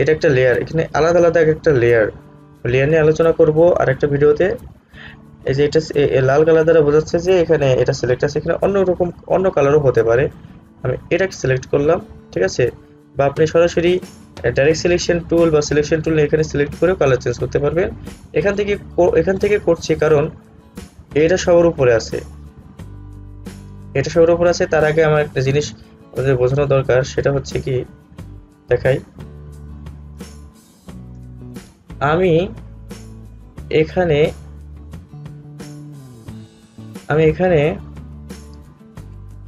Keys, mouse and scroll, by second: 11.2 click, 25.5-26.4 alt+scroll down 1, 30.3 space, 30.5 click, 30.9 space, 32.2-39.4 drag.